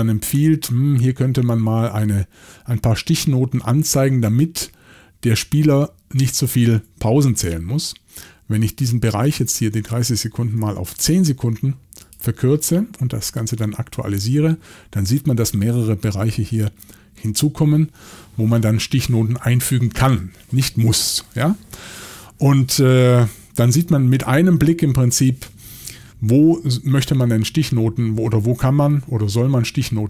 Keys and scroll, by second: 10.6-11.5 typing, 27.0 typing.